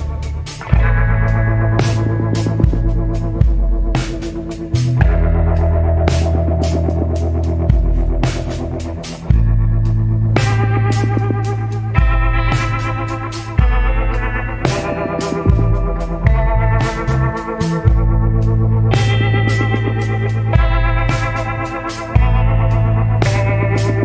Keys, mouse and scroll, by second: 3.1 scroll up 1, 5.6 scroll up 1, 7.1 scroll down 1, 9.0 scroll down 1, 9.5 scroll up 1, 12.5 scroll down 1, 14.9 scroll up 1.